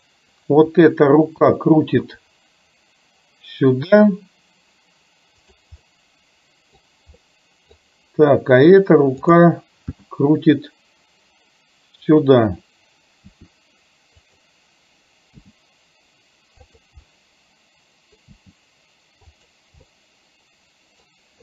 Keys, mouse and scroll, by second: 1.6 g, 5.8-6.8 middle drag, 7.3-7.8 scroll up 1, 9.3 click, 10.1 g, 13.4 r, 15.4 g, 17.2-18.3 middle drag, 18.4 g, 19.8-20.9 middle drag.